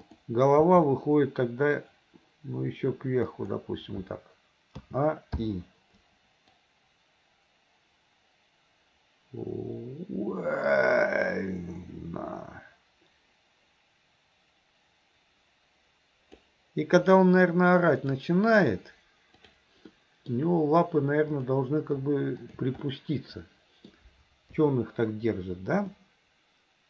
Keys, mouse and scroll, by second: 0.0 click, 0.7 g, 4.8 a, 5.4 i, 6.6-16.5 drag, 18.0 click, 19.5 click, 20.0-20.3 middle drag, 22.4 shift+click, 22.9-23.9 middle drag, 24.5 KP_3, 26.0-26.8 middle drag.